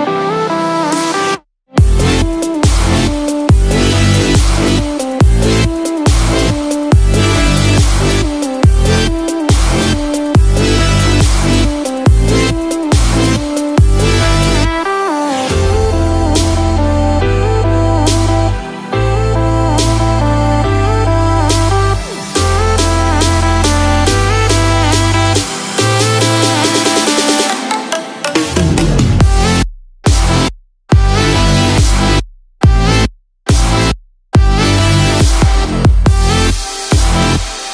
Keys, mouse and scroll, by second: 5.3 ctrl+s, 6.8 click, 7.4-8.0 scroll down 3, 7.9 middle click, 8.7 middle click, 9.0 scroll down 1, 9.5 shift+middle click, 9.6 shift+middle click, 9.9 middle click, 10.5 middle click, 10.9-11.8 scroll up 3, 11.8 click, 12.3 scroll down 1, 13.0 scroll down 1, 13.4-15.7 scroll up 1, 15.7 click, 17.1 click, 18.7-19.3 scroll down 2, 19.0-19.3 scroll up 1, 19.9 scroll down 1, 20.6 middle click, 21.4 space, 22.0-23.0 scroll down 4, 23.0 middle click, 23.9-24.8 scroll down 2, 24.8 KP_0, 29.2 click, 30.5 click, 30.5-30.9 scroll down 1, 31.0 scroll down 5, 34.0 click, 34.0 scroll up 3, 36.4 KP_0, 37.3 middle click, 37.6-37.7 scroll up 6.